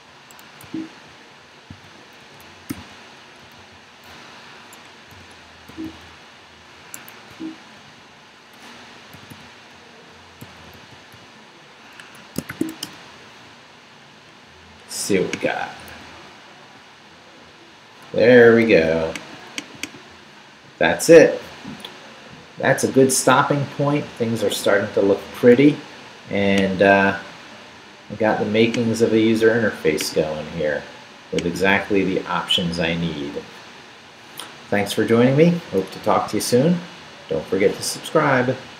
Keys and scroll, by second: 0.5 Escape, 0.6 o, 1.7-4.1 typing, 2.2 shift+Left, 4.6 Escape, 5.1 shift+., 6.9 Escape, 7.3 u, 9.1 shift+., 12.0 Escape, 12.3-13.2 typing, 15.9 super+r.